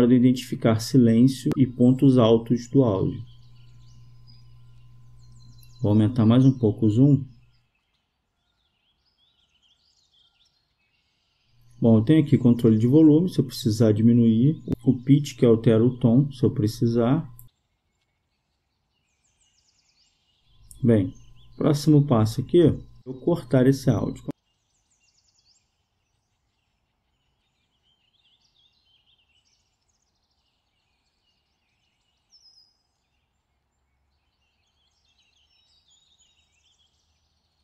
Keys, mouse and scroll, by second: 6.8 click, 12.8-15.0 drag, 16.1-17.6 scroll down 1, 17.6-18.1 scroll down 1, 21.4-26.4 drag, 26.6 click, 33.1-34.8 drag.